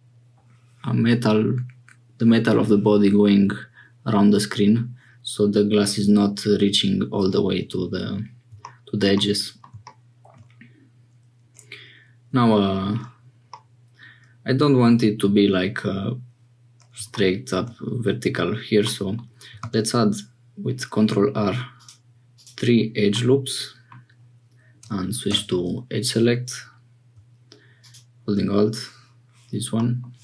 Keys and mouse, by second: 9.1-10.4 middle drag, 13.5-15.4 drag, 18.8 click, 19.6 ctrl+r, 23.1 click, 25.3 2, 29.7 middle click.